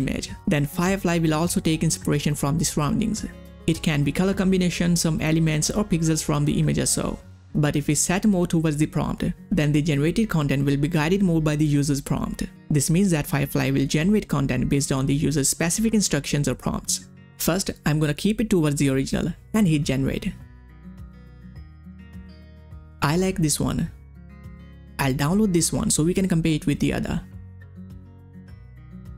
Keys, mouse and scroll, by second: 19.8 click, 19.8 click, 22.3 click, 22.4 click, 25.9 click, 26.0 click, 27.7 click, 27.7 click.